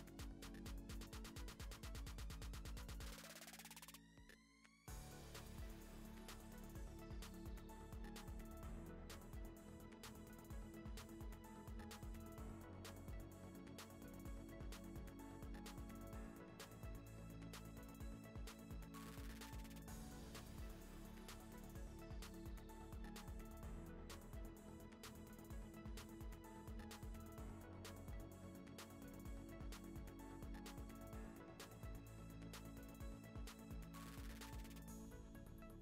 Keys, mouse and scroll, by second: 0.2 r, 0.5 ., 0.9 r, 2.3 click, 2.4 r, 3.5 ctrl+z, 3.6 ctrl+z, 3.9 shift+click, 4.1 r, 9.3 click, 9.4 click, 9.7 g, 10.2 r, 10.5 ., 10.7 r, 11.7 drag, 11.9 g, 12.8 click, 12.9 ctrl+s, 14.0 ctrl+s, 15.6 g, 15.9 click, 16.2 click, 16.5 z, 16.7 click, 17.5 click, 17.8 KP_0, 18.2 ctrl+s, 19.0 click, 19.2 ctrl+b, 19.6 drag, 19.9 click, 20.0 click, 20.2 click, 20.6-21.3 drag, 22.4 click, 22.8 click, 22.9 click, 23.2 scroll down 10, 23.8-25.1 drag, 25.1 scroll up 4, 25.3-25.9 scroll down 4, 25.4 ctrl+s, 25.9 click, 26.5 ., 26.7 r, 27.2 r, 29.4 g, 31.7 r, 32.6 click, 32.8 click, 33.0 KP_0, 33.1 KP_0, 33.7 scroll down 1, 33.8 g, 34.6 click, 35.3 click, 35.6 KP_0.